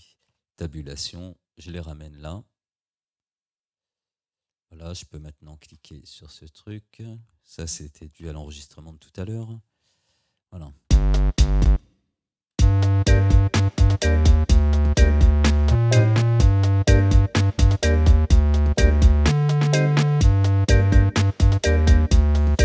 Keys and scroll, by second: 0.3 Tab, 8.2 Delete, 10.9 space.